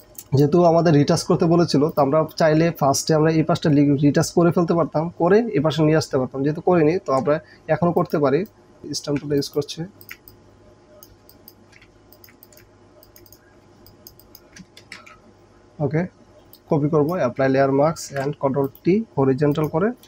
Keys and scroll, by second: 1.2 ctrl+space, 2.6 ctrl+s, 8.8 KP_8, 11.3 space, 11.9 alt+space, 12.7 alt+space, 13.7 alt+space, 14.7 ctrl+alt+space, 14.9 ctrl+alt+d, 16.4 ctrl+j, 18.1 ctrl+t.